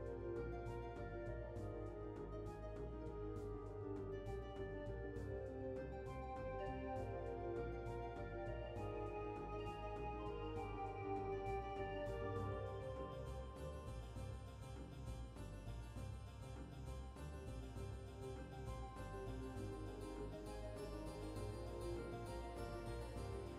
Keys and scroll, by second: 1.5 typing, 9.4 typing, 14.9 typing, 20.7 typing, 23.3 typing.